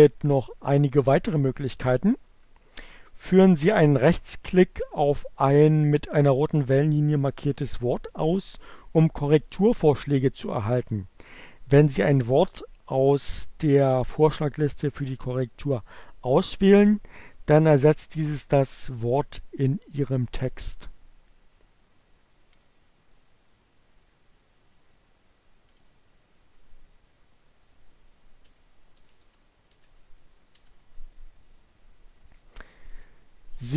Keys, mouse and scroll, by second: 24.7 click, 26.1 space, 28.2 x, 29.4 x.